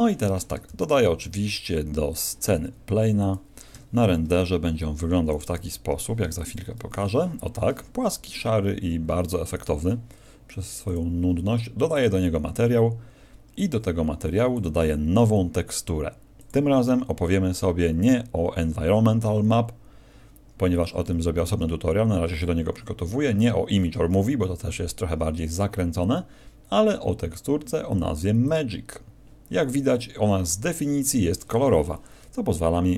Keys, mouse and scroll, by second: 0.7 shift+a, 2.5 s, 3.3 click, 3.7 KP_0, 5.3 right click, 5.5 g, 6.5 click, 9.0 Escape, 9.5 right click, 10.8 click, 11.9 click, 14.5 click, 16.3 click.